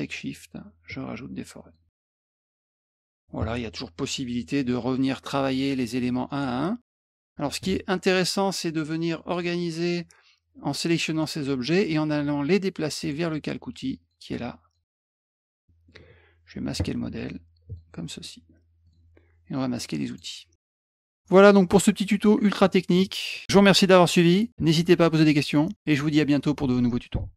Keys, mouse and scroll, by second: 0.1-1.7 shift+drag, 2.2 shift+click, 6.2 click, 6.9 middle click, 9.3 click, 10.5 click, 11.6 right click, 13.0 click, 14.0 click, 14.6 click, 15.6 middle click, 17.6 click, 18.2 middle click, 18.8 click, 20.1 click, 20.6 middle click, 20.6 scroll up 1, 20.8 middle click, 20.8 scroll.